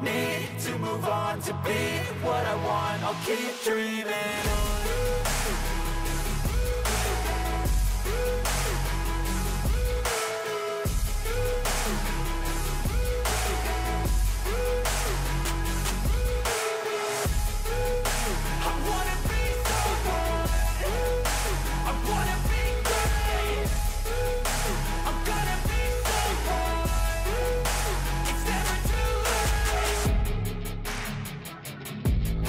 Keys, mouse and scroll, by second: 29.3-31.2 typing, 32.1 ctrl+a.